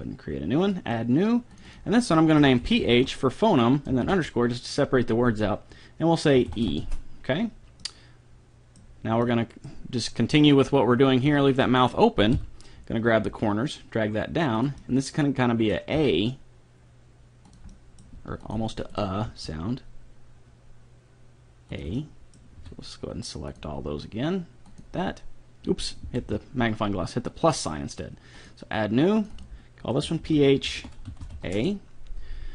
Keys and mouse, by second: 6.5 e, 6.7 e, 7.9 middle click, 10.7-13.1 right drag, 12.3 KP_3, 13.3 g, 14.8 click, 15.9 g, 17.7-18.9 middle drag, 18.1 g, 18.9-20.1 right drag, 19.3 g, 20.1 right click, 21.9-23.5 middle drag, 22.6 a, 23.5-25.1 drag, 25.3 click, 26.2 ctrl+z, 27.3-28.9 drag, 29.2-31.2 drag.